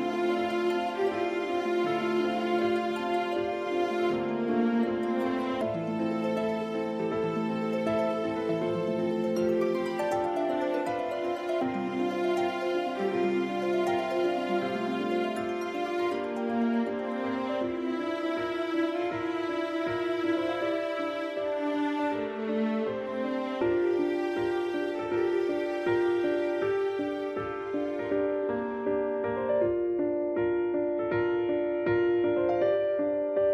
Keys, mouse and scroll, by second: 0.9 alt+right click, 1.5 s, 3.2 click, 3.7 a, 4.4 alt+right click, 5.1 s, 6.5 click, 6.6 middle click, 8.4 a, 8.6 middle click, 9.3 right click, 10.8 middle click, 12.0 click, 15.2 ctrl+z, 16.0-16.5 scroll down 2, 16.3 middle click, 16.9 click, 18.8 middle click, 18.9 click, 23.3 middle click, 24.6-25.4 scroll up 2, 25.4 middle click, 26.2 b, 27.6 e, 29.9 click.